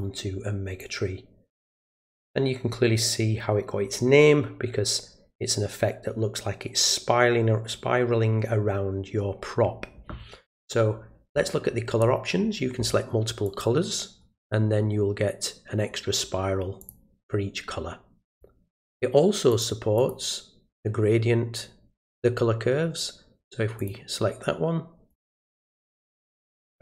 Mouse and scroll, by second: 0.8-1.9 drag, 13.4 click, 16.8 click, 18.3 click, 19.5 click, 19.9 click, 23.8 click, 25.1 right click.